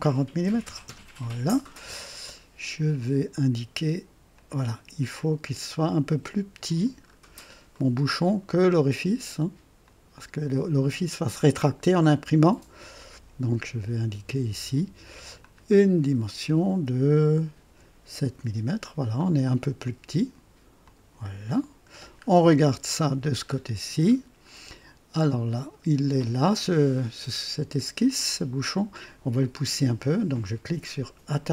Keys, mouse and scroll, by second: 0.4-1.0 typing, 0.8 KP_Enter, 4.3-6.8 drag, 7.0 scroll up 1, 7.7-8.3 right drag, 9.8 click, 12.9 click, 15.3 click, 17.6 KP_7, 18.3 KP_Enter, 18.3 Return, 20.8 click, 21.9 scroll down 1, 22.6 KP_3, 23.4-24.3 scroll up 2, 24.7-25.6 right drag, 31.2 click.